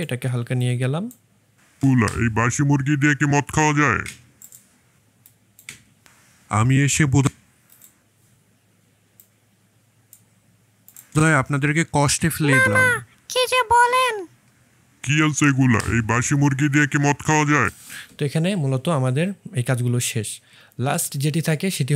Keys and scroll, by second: 1.7 space, 11.0 space, 17.6 space.